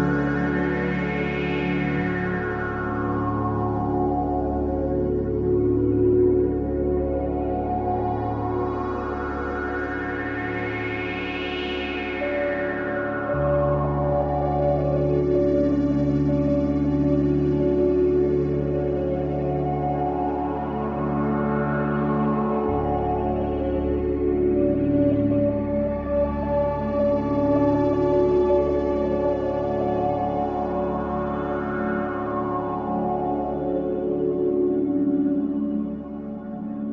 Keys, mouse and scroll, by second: 1.0 ctrl+b, 2.5-5.0 drag, 5.8-6.8 shift+middle drag, 6.8-7.8 drag, 8.9-12.3 drag, 13.9 click, 14.8-16.3 middle drag, 16.6-18.4 middle drag, 18.4 click, 19.4 click, 20.1 shift+click, 21.3 shift+click, 22.4 click, 24.0-25.6 drag, 27.6 drag, 27.9-30.0 middle drag, 30.0 click, 30.9-31.6 middle drag, 31.6 click, 33.6 e, 36.8-36.9 scroll down 4.